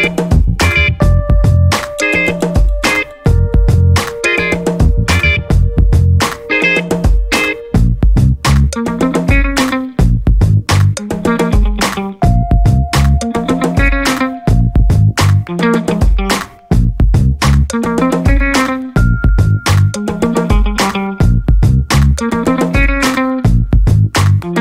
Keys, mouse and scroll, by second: 0.9 click, 2.5 click, 4.3 click, 5.7 click, 7.3 click, 8.2 1, 8.7 2, 10.8 click, 12.5 click, 14.3-15.8 drag, 16.3-18.0 drag, 18.8 click, 19.8 click, 20.2 click, 21.2-22.6 drag, 23.3 click, 24.2 click.